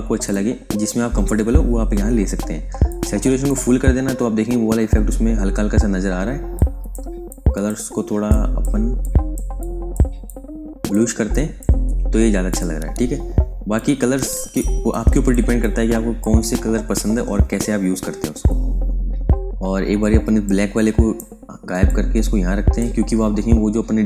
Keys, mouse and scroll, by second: 2.8 click, 6.5 click, 15.5 click, 20.4 click.